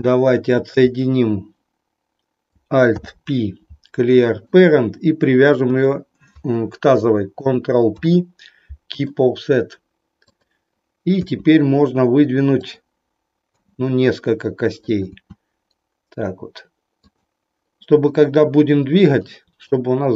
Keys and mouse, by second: 2.9 alt+p, 5.6 click, 7.9 ctrl+p, 10.3 click, 11.3 e, 13.5 e, 14.9 click, 15.1 e, 17.1 click, 19.3 middle click.